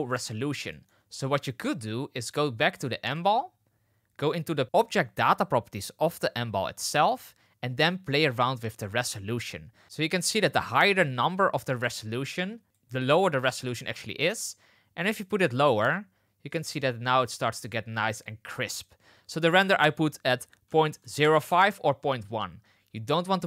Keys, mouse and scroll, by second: 0.7 shift+middle drag, 5.3 click, 11.6-12.8 drag, 13.1-15.2 drag, 15.5-18.7 shift+drag, 19.6-22.3 drag.